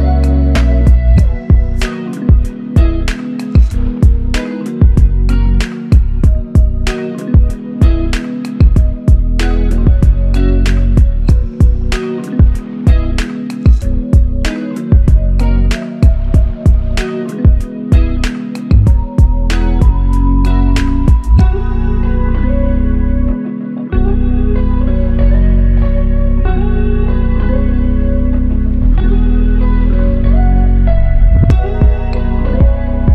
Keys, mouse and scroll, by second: 3.4 typing, 4.5 double click, 10.5 ctrl+z, 10.9 ctrl+z, 11.3 ctrl+z, 11.7 ctrl+z, 11.9 ctrl+z, 12.2 ctrl+z, 12.6 ctrl+z, 13.3 ctrl+z, 16.6 alt+click, 17.2 w, 20.9 typing, 23.3 ctrl+click, 25.1 q, 25.3 ctrl+click, 30.2 double click.